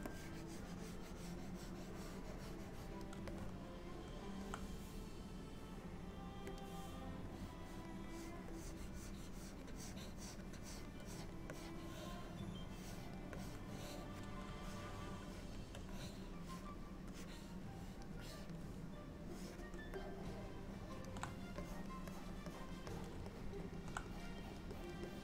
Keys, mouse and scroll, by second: 0.2 click, 3.4 middle click, 6.7 click, 7.4 click, 8.2 click, 8.6 click, 8.9 click, 9.8 click, 10.7 click, 11.2 click, 11.6 click, 13.5 click, 14.8-15.7 shift+click, 15.4 shift+click, 16.0 click, 17.2 click, 17.4 click, 18.3 click, 19.5 click, 20.1 middle click, 21.7 click, 22.2 click, 22.6 click, 23.0 click, 23.4 middle click, 24.2 click, 24.5 click, 24.8 click, 25.1 click.